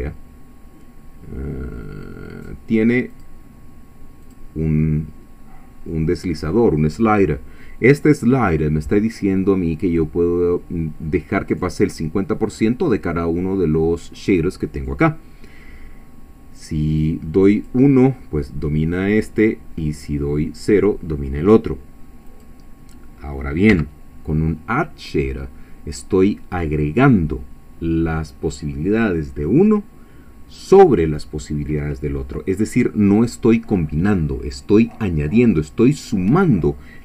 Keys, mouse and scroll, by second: 3.1 click, 4.2 click, 17.0-18.2 drag, 20.0 click, 22.3 click, 23.7 x.